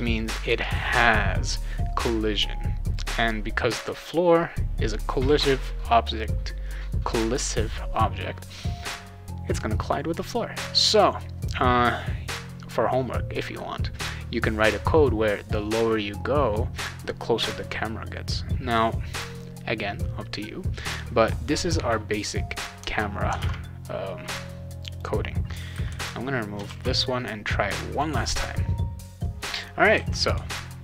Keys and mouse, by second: 23.4 alt+Tab, 24.9 click, 25.7 /, 26.6 ctrl+s, 27.9 click, 29.0 click, 29.9 w.